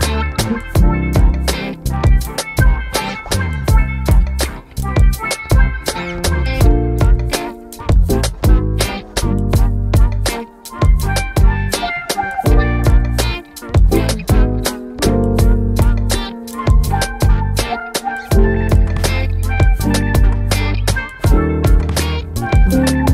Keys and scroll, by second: 13.3 typing, 13.5 Return.